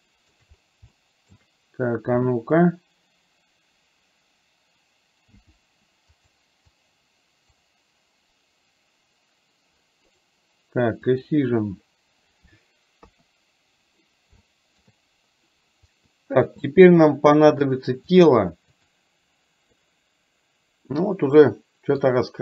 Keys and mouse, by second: 0.0 shift+middle click, 1.0 shift+middle click, 11.3 click, 13.0 KP_1, 14.5 shift+middle click, 16.1 middle click, 18.1-19.1 drag, 19.8-22.0 middle drag.